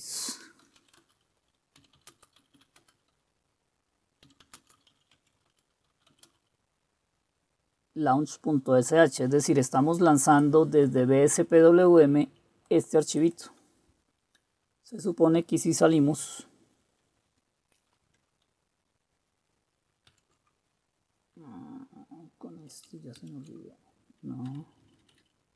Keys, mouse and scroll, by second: 0.5-6.5 typing, 5.6 Return, 20.2 super+q, 23.3 ctrl+super+q, 24.5-25.2 typing.